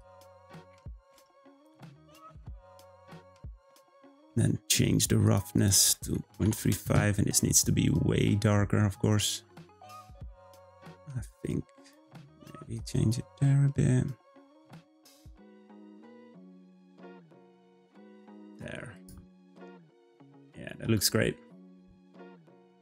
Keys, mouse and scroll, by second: 5.5-8.6 drag, 10.2 click, 18.9 click, 20.2 click.